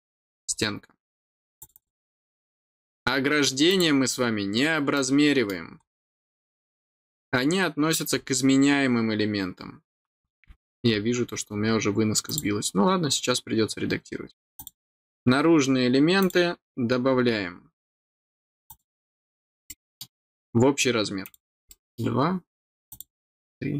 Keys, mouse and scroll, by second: 0.4 scroll down 1, 1.5 click, 1.7 click, 3.6 click, 4.3 scroll down 1, 4.9 middle click, 5.8 scroll up 1, 8.1 scroll up 1, 10.2-10.6 scroll down 2, 10.9 scroll up 1, 12.2 click, 14.5 click, 16.2 click, 17.2 middle click, 18.6 click, 19.3 scroll down 1, 19.6 middle click, 21.2 click, 21.6 middle click, 22.8 click.